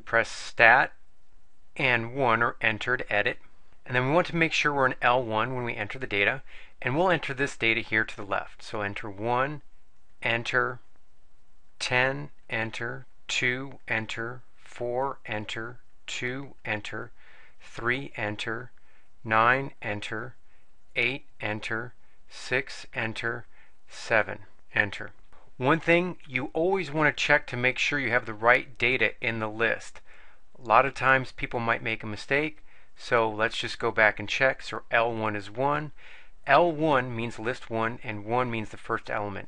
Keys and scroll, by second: 2.7 Return, 9.4 1, 10.4 Return, 11.3 1, 12.1 0, 12.6 Return, 13.3 2, 13.9 Return, 14.5 4, 15.4 Return, 16.1 2, 16.8 Return, 17.7 3, 18.1 Return, 19.3 9, 20.0 Return, 20.9 8, 21.5 Return, 22.1 6, 22.9 Return, 23.9 7, 24.9 Return, 27.2 Up, 27.7 Up, 28.1 Up, 28.3 Up, 28.7 Up, 28.9 Up, 29.4 Up, 30.7 Up, 31.5 Up, 32.4 Up.